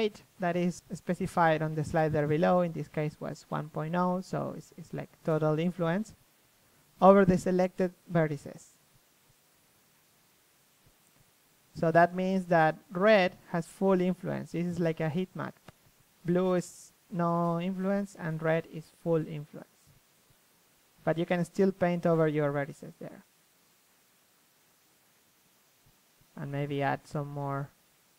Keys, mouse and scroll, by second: 1.8 Tab, 4.3 KP_3, 5.4 KP_1, 6.3 Tab, 6.7 a, 7.0 a, 7.4 ctrl+n, 7.8 Tab, 8.5 KP_3, 11.6 KP_1, 14.9 Tab, 16.1 a, 16.4 KP_3, 16.7 Tab, 18.7 click, 20.0-21.2 drag, 21.5 click, 21.8 click, 22.3 KP_3, 22.4 click, 23.4 click, 25.6 KP_3, 26.2-27.5 middle drag, 27.5 click.